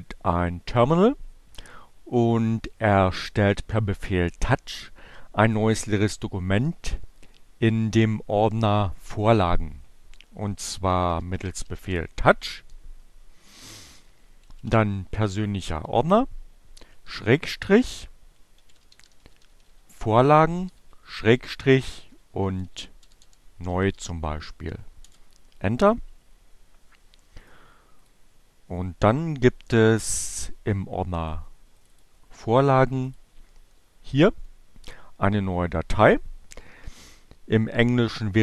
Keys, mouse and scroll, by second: 1.6-3.9 drag, 8.9-9.8 typing, 11.3-12.1 typing, 16.5-17.7 typing, 18.9-20.4 typing, 21.5-23.7 typing, 24.4 Return, 26.9 right click, 28.0 click, 29.9-31.5 drag, 31.8 click, 33.2 click.